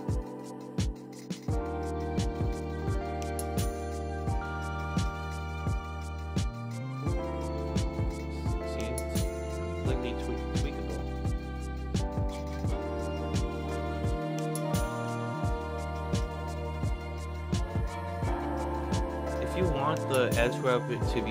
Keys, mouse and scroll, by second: 9.7-11.8 drag, 14.2-14.6 scroll down 1, 14.6 middle drag, 15.6 alt+click, 16.3 alt+middle click, 16.7 alt+right click, 17.1 alt+click, 17.6 alt+right click, 17.9 alt+middle click, 18.4 alt+right click, 19.4 middle drag.